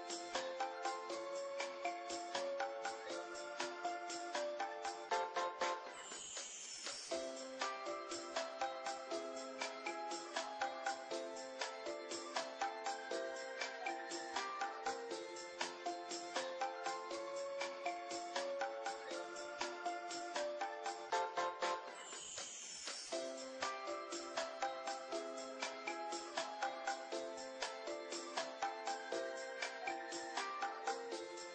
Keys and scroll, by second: 0.4 Tab, 1.1-3.0 typing, 1.5 Tab, 2.2 ctrl+a, 2.2 ctrl+r, 2.3 Tab, 3.3 ctrl+l, 6.7 ctrl+z, 6.7 f, 7.3 Tab, 8.3-11.3 typing, 8.7 ctrl+z, 9.1 Tab, 9.4 Tab, 9.7 Tab, 10.7 Tab, 12.3 Tab, 13.1 ctrl+l, 13.3 ctrl+Tab, 13.3-17.6 typing, 13.5 ctrl+z, 15.4 Tab, 15.7 Tab, 17.7 ctrl+., 18.3 ctrl+z, 18.7-23.1 typing, 18.9 Tab, 19.6 Tab, 20.1 Tab, 20.7 ctrl+., 21.2 ctrl+i, 21.2 Tab, 21.4 Tab, 21.8 Tab, 22.4 ctrl+l, 22.8 Tab, 23.1 ctrl+., 24.7 Tab, 26.2 KP_1, 26.4 Tab, 26.5 KP_1, 26.6 Tab, 26.8 g, 27.7 ctrl+Tab, 27.7 z, 27.9 ctrl+l, 28.4 Tab, 29.1 g, 29.9 KP_1, 30.4 ctrl+r, 30.6 ctrl+Tab.